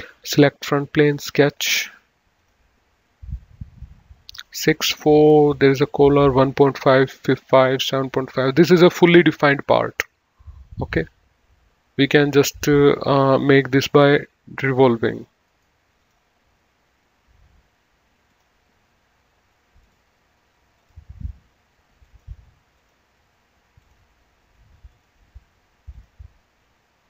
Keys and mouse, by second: 0.5 click, 2.7 click, 9.9 click, 12.4 click, 13.9 click, 15.8 right click, 16.3 click, 18.5 click, 20.0 click, 22.4 click.